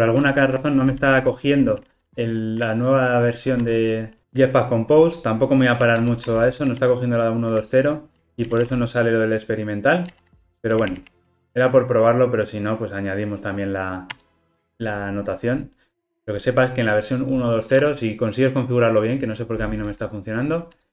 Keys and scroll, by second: 6.1 alt+Return.